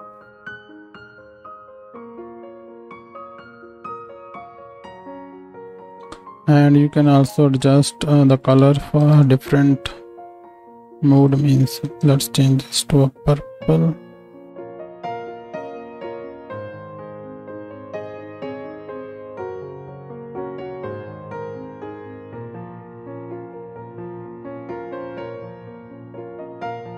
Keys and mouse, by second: 1.8 ctrl+space, 2.8 s, 5.3 ctrl+middle click, 5.4 ctrl+space, 7.0 click, 7.7 middle click, 8.4 click, 9.0 shift+d, 9.2-10.8 middle drag, 10.8-12.0 drag, 12.0-18.8 middle drag, 15.2 z, 18.8 click, 19.2 shift+middle click, 19.4 shift+d, 19.8-22.5 drag, 22.5-23.6 shift+middle drag, 23.6-25.0 right drag, 24.7-26.4 drag, 24.7 middle click, 25.1 KP_0, 25.3 z, 25.5 z, 26.4-26.9 middle drag.